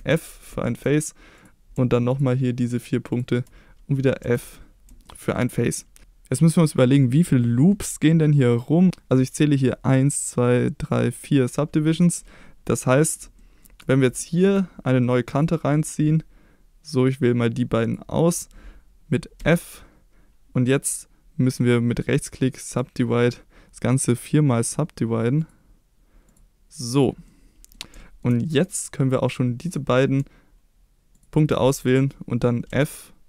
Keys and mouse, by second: 0.0 f, 0.6 shift+middle click, 2.2 shift+click, 3.1 shift+click, 4.2 f, 5.1 shift+middle click, 5.8 middle click, 7.1 middle click, 8.6 middle click, 12.9 middle click, 13.4 shift+middle click, 14.3 shift+middle click, 15.4 click, 17.9 shift+click, 19.4 f, 22.0-22.8 right drag, 24.6 click, 25.4 click, 27.3-27.7 middle drag, 28.0 shift+middle click, 28.5 middle click, 32.7 f.